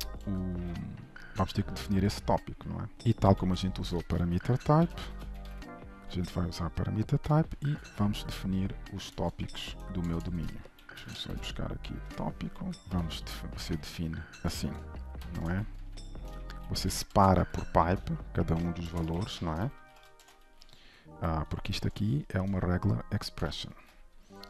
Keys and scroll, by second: 0.3 ctrl+Tab, 6.2 Return, 7.6 ctrl+Tab, 11.0 ctrl+n, 12.8 ctrl+v, 22.7 ctrl+shift+Return, 23.7 ctrl+z.